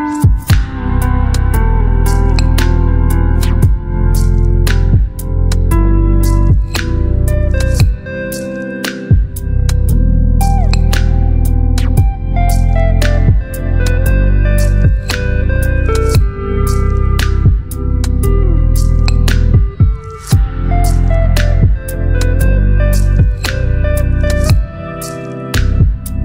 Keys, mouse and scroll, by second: 15.9 ctrl+t, 17.1-18.2 click, 22.6-25.7 drag.